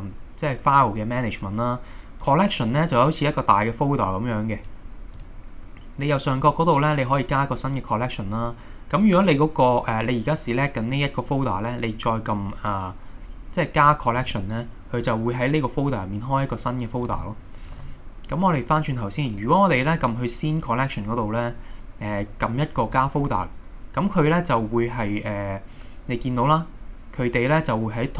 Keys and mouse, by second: 18.2 super+z, 18.2 x, 19.4 click, 23.0 click.